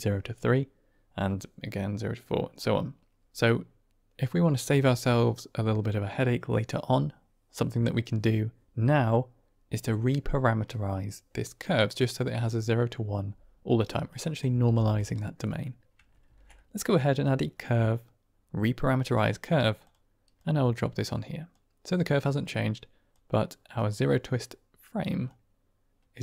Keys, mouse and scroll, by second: 14.0 drag, 14.5 g, 15.5 click, 16.2 shift+a, 20.3-21.5 drag, 22.3 middle click, 23.0 click, 25.2-26.2 shift+drag.